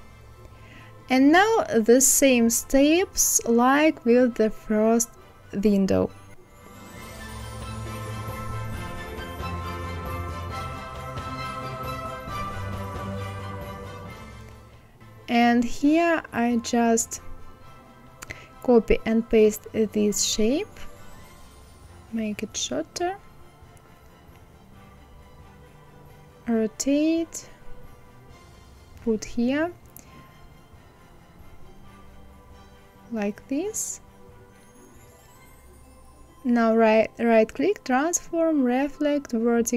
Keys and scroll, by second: 4.9 ctrl+v, 17.7 ctrl+c, 18.1 ctrl+v.